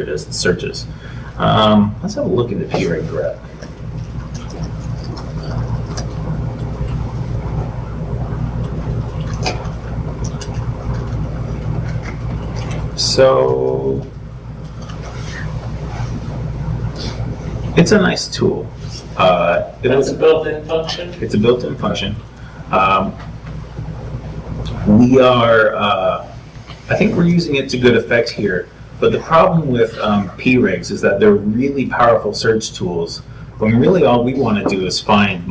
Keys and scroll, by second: 0.1 super+Tab, 1.4 super+t, 1.9 super+l, 23.6 super+Tab, 27.8 super+Tab.